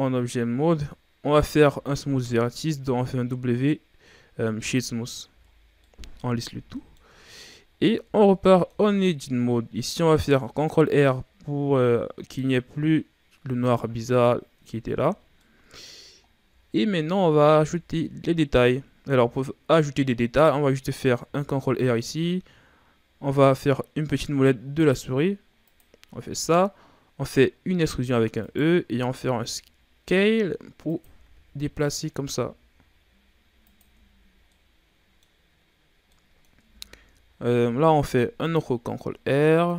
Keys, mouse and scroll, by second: 0.2-2.0 ctrl+scroll down 3, 2.0 w, 5.3 a, 5.5 scroll down 1, 5.8-7.2 middle drag, 7.2-7.5 ctrl+scroll down 3, 7.5-7.9 scroll up 4, 7.9 Tab, 8.3 middle click, 8.9-9.8 scroll up 1, 10.2 ctrl+r, 14.6 Tab, 15.2 scroll down 1, 15.4-16.3 middle drag, 16.3 scroll up 1, 16.3-16.8 scroll down 1, 16.8-17.4 scroll up 1, 17.4 Tab, 18.1-20.5 scroll up 1, 20.5-21.1 scroll up 1, 21.2 ctrl+r, 27.7 e, 29.0 s, 31.2 e, 32.2 s, 33.8 Tab, 34.2 scroll down 2, 34.5-35.5 middle drag, 35.5-36.1 scroll up 3, 36.1 middle click, 36.6 Tab, 37.6 ctrl+r.